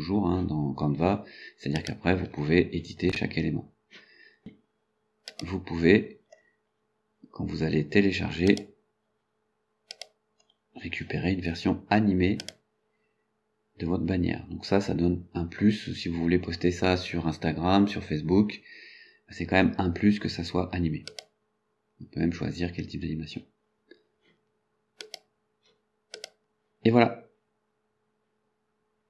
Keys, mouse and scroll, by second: 1.8 click, 5.3 click, 6.7-7.0 scroll down 2, 8.5 click, 10.0 click, 10.8-11.1 scroll down 2, 12.4 click, 21.1 click, 25.0 click, 26.2 click.